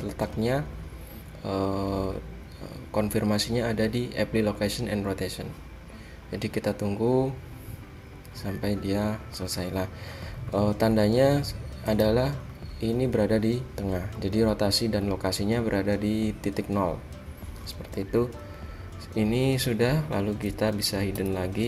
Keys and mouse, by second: 10.2 middle click, 10.5 middle click, 12.2-13.5 middle drag, 15.8-16.9 middle drag, 18.3-21.3 middle drag, 21.3 h.